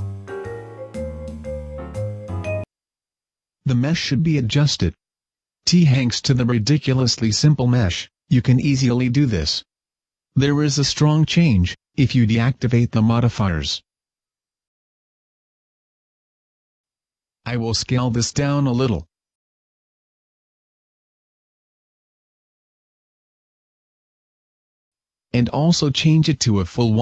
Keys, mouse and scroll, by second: 1.1 Escape, 3.2-3.6 scroll up 1, 3.6 Tab, 4.2 scroll up 1, 4.4 a, 5.2 a, 5.4 scroll down 2, 6.2 middle click, 6.9 scroll down 2, 7.4 shift+middle click, 7.6-8.0 scroll up 1, 10.7 click, 11.3 Tab, 12.6 click, 13.5 click, 14.0 click, 15.3 click, 16.0-16.8 scroll up 1, 16.8 Tab, 17.1 shift+middle click, 18.1 alt+right click, 20.0 s, 22.4 click, 22.6 Tab, 23.6 KP_0, 25.0 Escape, 25.7 click.